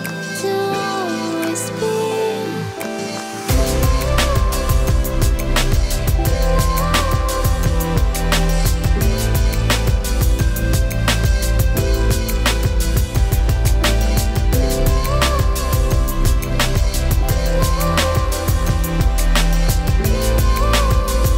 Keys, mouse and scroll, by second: 0.0-1.4 middle drag, 2.9-3.3 right drag, 3.3 ctrl+shift+a, 3.6 Tab, 5.2-5.6 drag, 5.3-5.9 right drag, 6.0 middle click, 6.3 right click, 6.8 middle click, 6.8-7.5 right drag, 7.5-8.7 middle drag, 8.7 0, 9.0 0, 11.3 click, 12.5 KP_0, 12.7 KP_0, 16.0 click, 16.0 KP_0, 16.3-16.8 middle drag, 16.8 click, 17.4 middle click, 18.0 click, 18.7-20.2 right drag, 19.8 click, 20.8-21.2 drag.